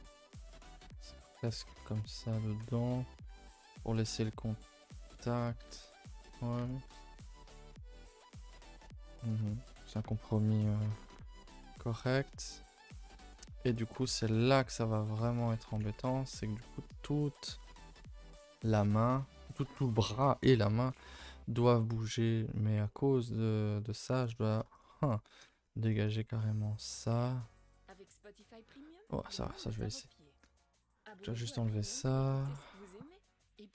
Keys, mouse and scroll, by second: 0.8 g, 1.6 middle click, 1.8 g, 2.6 Tab, 2.8 middle drag, 3.0 a, 3.1 a, 3.2 scroll down 2, 3.4 ctrl+s, 3.5-5.7 middle drag, 5.7 Tab, 5.8 middle click, 6.0-6.6 scroll up 2, 6.6 Tab, 6.9 KP_0, 7.4 a, 7.5 a, 8.5 shift+middle click, 8.8-9.4 scroll up 2, 9.4 shift+middle drag, 9.6 scroll down 2, 10.1-11.3 shift+middle drag, 11.3-12.0 scroll up 5, 11.6 middle drag, 12.1-12.9 shift+middle drag, 13.0-13.9 middle drag, 13.9 click, 14.0 Tab, 14.4 a, 14.5 a, 15.2 click, 15.6 a, 15.7-17.5 middle drag, 17.5-17.9 scroll up 2, 17.9 shift+middle click, 18.1 scroll up 1, 18.3 a, 18.5 a, 18.7 middle click, 19.3 3, 20.8 scroll down 1, 20.9-24.4 middle drag, 24.4 click, 24.8 shift+click, 25.1 shift+click, 25.9 x, 26.4-27.2 middle drag, 27.2 click, 27.5 shift+click, 28.1 x, 32.3 alt+Left, 32.6 middle click, 32.7 middle click, 33.1 middle click.